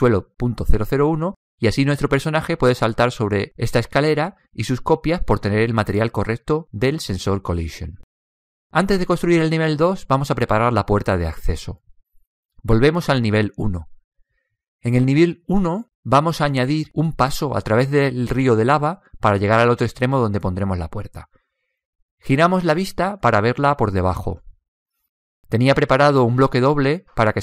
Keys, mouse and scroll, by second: 12.9 click, 16.8-20.5 middle drag, 21.8-23.8 middle drag, 25.9 right click.